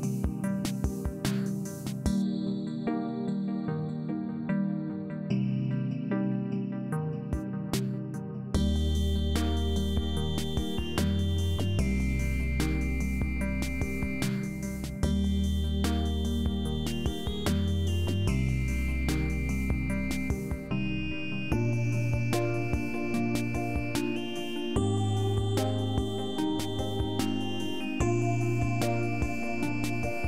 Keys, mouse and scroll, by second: 1.1 shift+s, 2.6 shift+s, 3.8 shift+s, 5.2 shift+s, 9.0 shift+s, 10.5 shift+s, 11.7 shift+s, 17.2 shift+s, 18.6 shift+s, 20.2 shift+s, 22.1 shift+s, 24.2 shift+s, 25.4 shift+s, 27.2 shift+s, 28.8 shift+s.